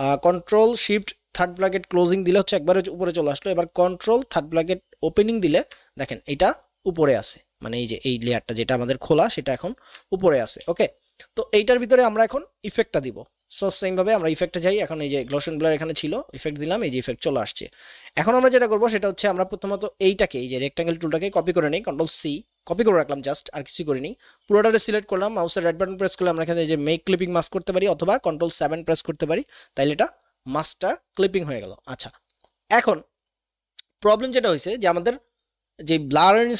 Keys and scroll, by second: 4.2 ctrl+[, 9.7 ctrl+z, 10.6 ctrl+z, 22.0 ctrl+c.